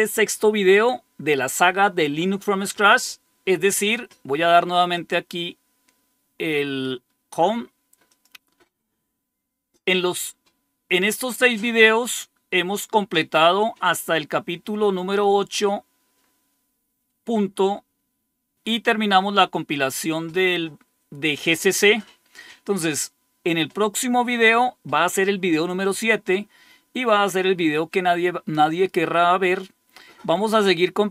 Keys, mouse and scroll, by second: 4.8 click, 8.0 click, 12.5-13.1 scroll down 3, 13.6 scroll down 2, 15.0-16.8 scroll down 10, 28.9 scroll down 2.